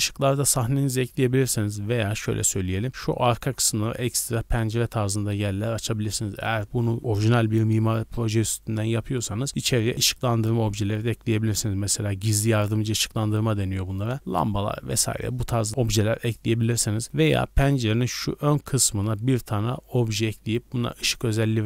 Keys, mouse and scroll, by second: 1.7 z, 2.0 scroll down 1, 2.1 middle drag, 2.3 drag, 2.5-2.9 scroll down 3, 2.9 middle click, 2.9-3.5 scroll up 4, 3.7 shift+middle click, 4.0-5.5 middle drag, 15.7-16.2 scroll down 3, 16.2-16.7 middle drag, 16.7 scroll down 2, 17.0-17.7 middle drag.